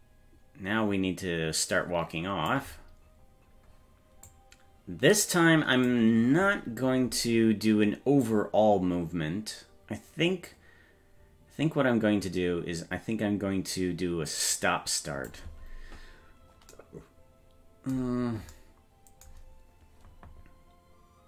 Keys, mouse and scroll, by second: 3.1-3.9 scroll down 3, 4.3-5.9 drag, 8.3-15.3 drag, 16.1-16.7 scroll up 1.